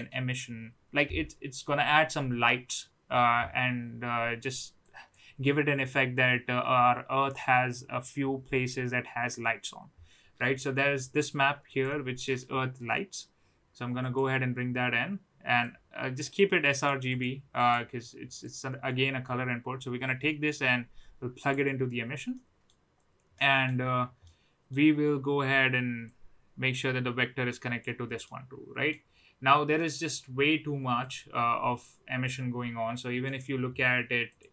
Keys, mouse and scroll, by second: 4.8 click, 15.6-16.2 drag, 16.7 click, 17.5 click, 18.5-21.5 drag, 22.3 middle click, 23.4 middle click, 24.2 middle click, 26.1-27.8 drag, 28.4 middle click, 29.7-30.1 middle drag, 31.0 click, 31.7-33.3 middle drag, 34.2 click.